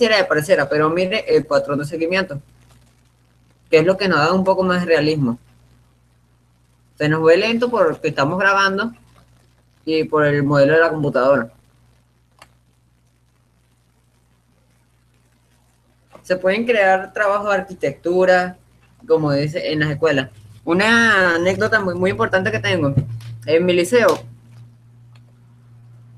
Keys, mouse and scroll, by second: 5.1-6.9 drag, 12.8-14.8 middle drag, 19.6-21.4 drag.